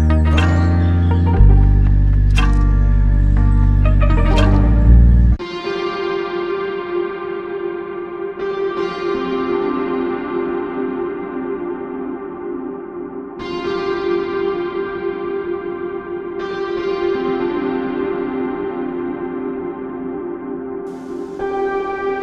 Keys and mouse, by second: 9.4 alt+click, 12.1 double click, 21.8 ctrl+click.